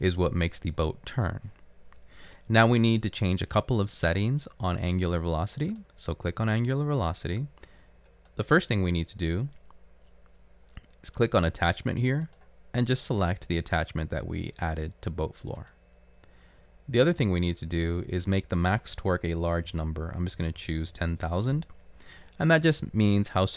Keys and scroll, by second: 19.6-21.5 typing.